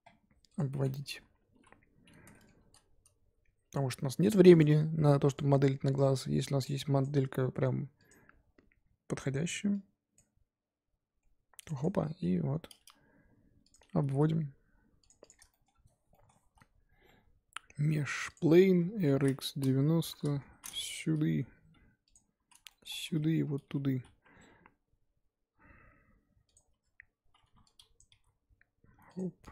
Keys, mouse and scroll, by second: 0.7 middle click, 1.5 KP_1, 2.3 shift+middle click, 2.6 shift+a, 13.0 g, 13.8 scroll up 1, 14.1 s, 15.2 click, 15.5 shift+middle click, 15.7-16.1 scroll up 3, 16.1 shift+middle click, 16.4 shift+a, 18.8 scroll down 2, 19.0 r, 21.0 g, 22.2 scroll up 2, 22.4 z, 22.7 shift+middle click, 23.9 g, 26.7 Tab, 27.4 1, 28.0 click, 28.1 g.